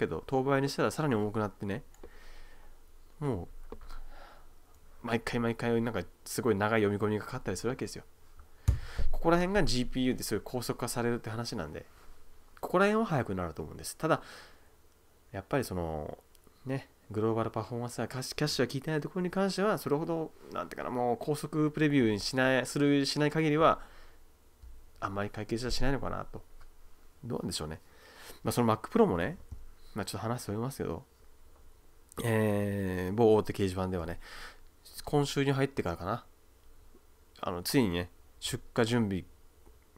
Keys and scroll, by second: 8.8 \, 8.9 `, 9.0 \.